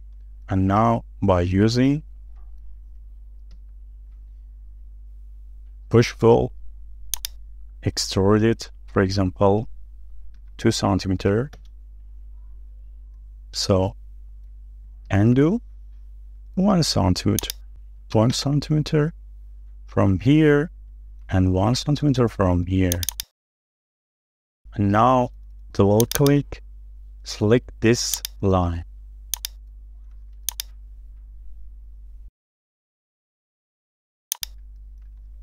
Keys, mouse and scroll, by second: 0.3-0.6 scroll up 1, 0.7 middle click, 1.1 scroll up 1, 1.4 shift+middle click, 4.5 typing, 11.3 typing, 12.5 Return, 14.1 middle click, 16.1 ctrl+z, 19.0 typing, 19.3 Return, 21.1 middle click, 23.1 double click, 23.6 middle click, 24.4 shift+middle click, 24.9-25.2 shift+scroll down 2, 25.2 shift+middle click, 25.7 space, 26.2 double click, 26.6 scroll down 1, 26.9 shift+middle click, 29.4 ctrl+click, 30.5 ctrl+click, 31.1-31.4 scroll down 1, 31.4 shift+middle click, 31.9-32.2 scroll up 1, 34.4 ctrl+click, 34.9-35.4 scroll down 6.